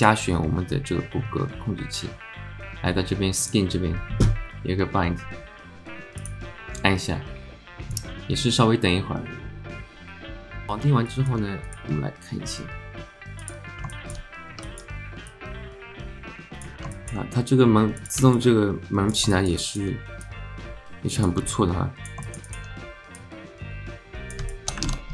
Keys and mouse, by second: 0.0 shift+click, 3.4 click, 10.9 alt+Tab, 11.1 alt+click, 13.4 click, 13.9 alt+shift+middle click, 14.6 alt+middle click, 15.4-16.7 drag, 16.9 alt+shift+drag, 18.7 alt+click, 19.3 shift+middle click, 19.6 alt+middle click, 20.3-21.4 drag, 21.5 alt+middle click, 22.3 shift+middle click, 22.5 alt+middle click, 23.2-24.4 drag, 24.5 alt+middle click, 25.0 ctrl+z.